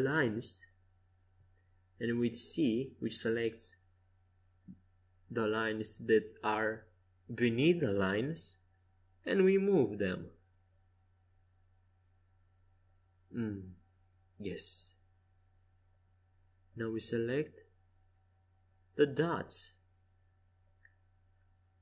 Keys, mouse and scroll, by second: 2.1 c, 5.3 middle click, 7.0 g, 9.4 middle click, 10.2-11.2 drag, 11.1 c, 13.9 g, 16.9-18.2 drag, 17.9 c, 19.5 a, 20.6 c.